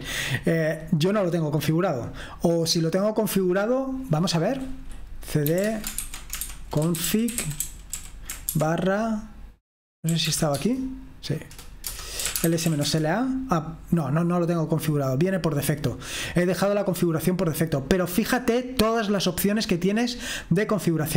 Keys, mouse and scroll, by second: 0.1-2.1 scroll down 2, 2.1-3.1 scroll down 1, 3.1-4.0 scroll down 1, 4.0 click, 5.2-8.5 typing, 9.8-10.7 typing, 11.8-13.4 typing, 15.3-16.1 typing, 15.8-18.0 scroll down 2, 18.0-20.9 scroll up 1.